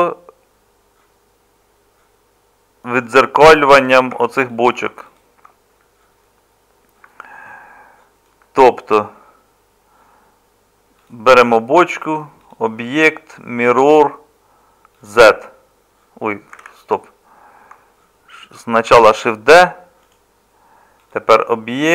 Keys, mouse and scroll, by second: 4.1 Tab, 16.6 ctrl+z, 18.9 shift+d.